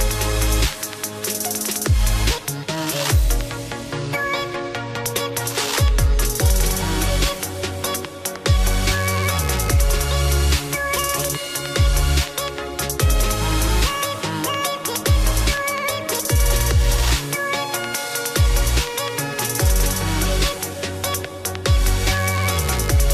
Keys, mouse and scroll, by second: 7.5 scroll, 7.8 right click, 8.2 click, 10.8 click, 12.8 click, 18.4 ctrl+x, 18.9 click, 20.3 ctrl+f.